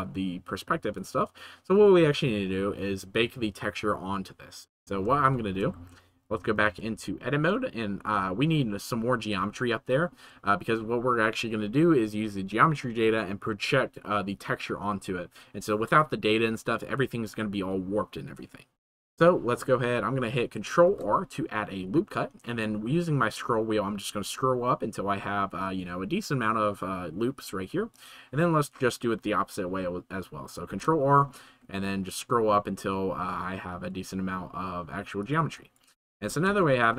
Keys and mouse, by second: 5.3-5.7 shift+middle drag, 5.9 ctrl+s, 6.3 Tab, 7.0 shift+middle click, 20.9 ctrl+r, 30.7 ctrl+r, 36.6 shift+middle click.